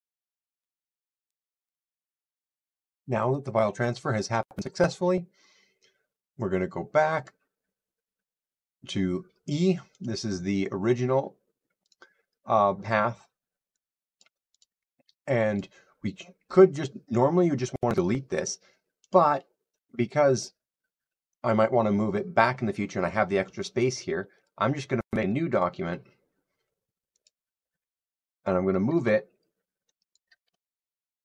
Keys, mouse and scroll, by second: 7.1 click, 9.9 click, 11.8 click, 14.1 click, 14.5 click, 15.5 click, 18.3 click, 19.0 click, 24.3 click, 25.5 click, 27.1 click, 30.0 click.